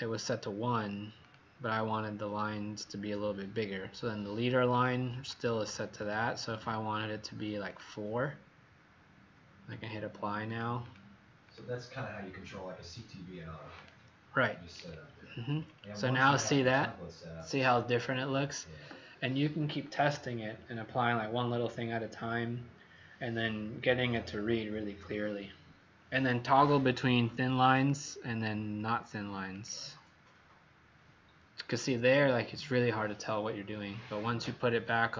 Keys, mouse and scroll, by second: 5.2 click, 7.6 click, 10.8 click, 13.7 click, 14.7 scroll up 4, 15.4 scroll up 5, 16.4 scroll up 2, 27.7 click.